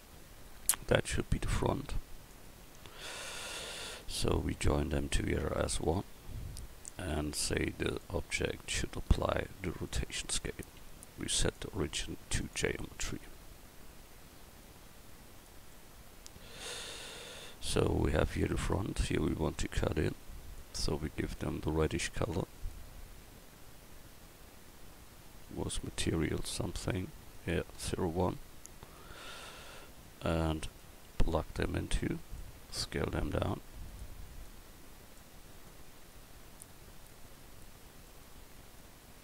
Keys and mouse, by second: 2.3 right click, 11.4-15.7 drag, 19.5-20.6 drag, 29.0 click, 32.8-33.9 drag, 32.8 s, 34.4 click, 37.7-38.2 drag, 38.8-39.2 drag.